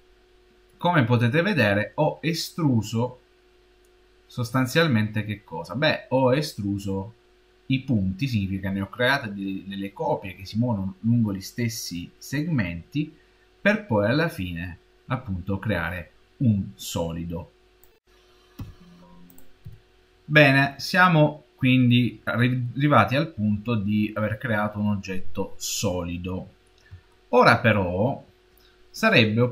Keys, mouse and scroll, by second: 0.7 middle click, 2.8 middle click, 19.1 click, 19.5 n, 21.7 shift+middle click, 22.5 middle click, 23.3 middle click, 27.0 shift+middle click.